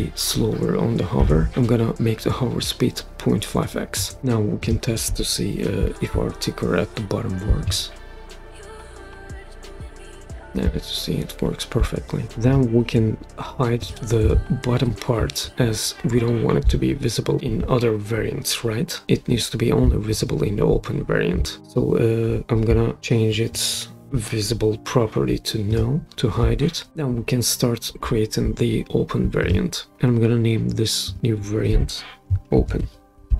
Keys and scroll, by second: 1.0-1.7 typing, 3.9 Return, 7.6 super+p, 32.3-33.3 typing.